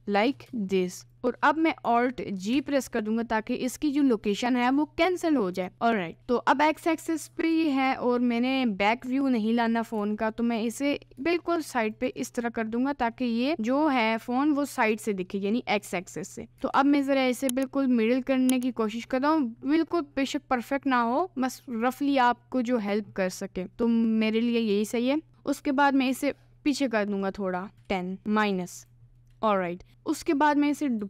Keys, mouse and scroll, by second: 1.1-2.5 right drag, 2.5 alt+g, 10.0 g, 16.7 g, 26.1 g, 27.7 g, 29.2 g, 29.2-31.0 middle drag.